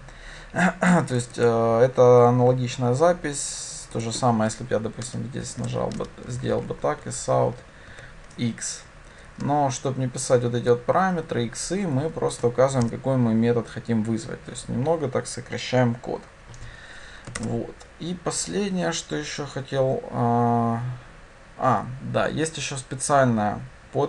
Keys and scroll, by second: 6.9 Tab, 17.4 shift+Return.